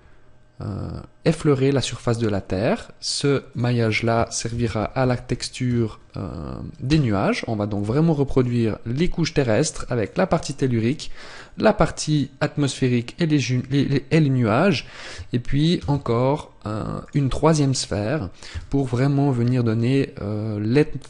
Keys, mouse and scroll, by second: 0.0 scroll up 3, 1.3 scroll up 1, 3.6 click, 9.6 click, 11.3 right click, 13.0-13.6 scroll down 1, 15.8 shift+d, 17.1 click, 18.5 s.